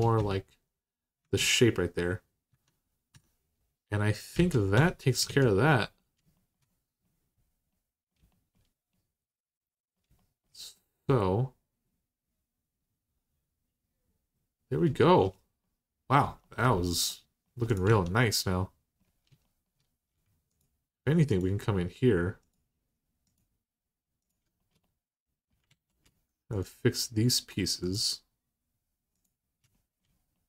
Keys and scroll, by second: 1.0 Tab, 2.3 Tab, 2.9 Tab, 4.2 alt+z, 4.5 Tab, 5.0 alt+z, 17.6 Tab, 25.5 alt+z.